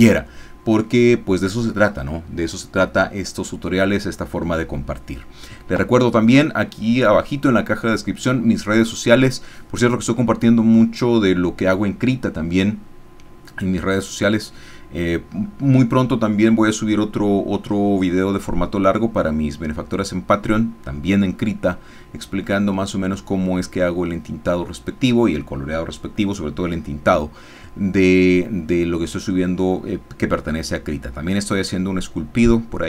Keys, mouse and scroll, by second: 1.6-3.4 scroll up 1, 3.4-6.7 scroll up 1, 6.7-8.7 scroll up 1, 8.7-11.7 scroll up 1, 11.7-13.1 scroll up 1, 13.1-16.8 scroll up 1, 16.8-18.1 scroll up 1, 18.1-18.8 scroll up 1, 18.8-21.9 scroll up 1, 21.9-23.4 scroll up 1, 23.4-24.7 scroll up 1, 24.7-26.8 scroll up 1, 26.8-28.7 scroll up 1, 28.7-32.0 scroll up 1, 32.0-32.8 scroll up 1.